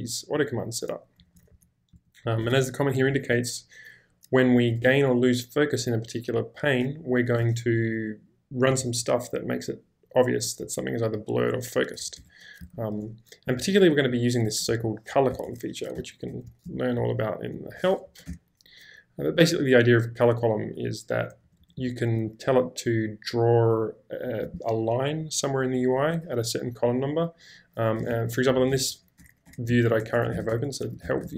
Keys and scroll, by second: 0.0-3.1 typing, 12.0 Escape, 12.2 Escape, 12.6 j, 14.7 shift+v, 15.3 Escape, 15.4 Escape, 15.7-17.6 typing, 18.1 Up, 18.3 Return, 20.7-21.8 typing, 27.8-30.1 typing.